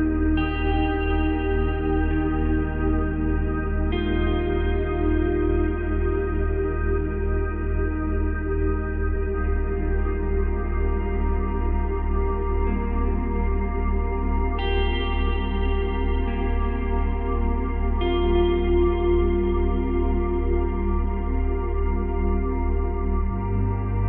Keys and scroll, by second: 10.1 ctrl+c, 10.2 ctrl+v, 16.3 ctrl+z, 20.2 Delete.